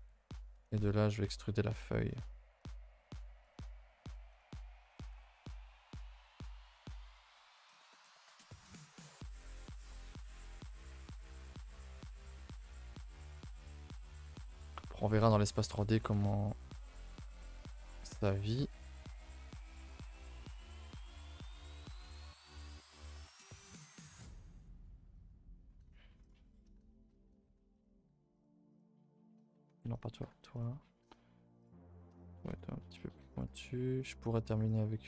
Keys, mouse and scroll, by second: 0.7 click, 3.3 click, 4.9 click, 5.9 click, 6.8 click, 7.6 click, 9.1 click, 18.6 click, 19.5 click, 21.4 click, 26.2 click, 27.7 click, 28.7 click, 29.9 click, 31.6 click, 32.1 click, 34.4 click.